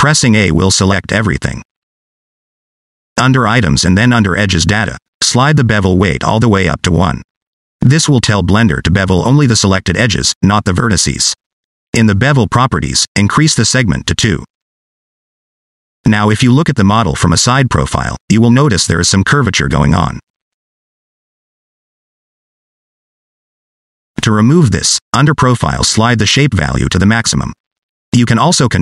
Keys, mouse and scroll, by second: 0.1 scroll down 1, 2.0 a, 5.2 click, 8.8 Tab, 9.6 middle click, 10.5 scroll up 2, 10.9 middle click, 13.9 click, 15.5 scroll down 1, 15.7 middle click, 16.4-16.9 scroll up 4, 17.0 shift+middle click, 18.1 middle click, 18.7-19.2 d, 19.3 click, 20.2 d, 20.3 d, 20.5 d, 20.7 d, 20.9 click, 21.9 d, 22.4 d, 23.8 ctrl+z, 24.0 ctrl+z, 25.0 click, 25.8 click.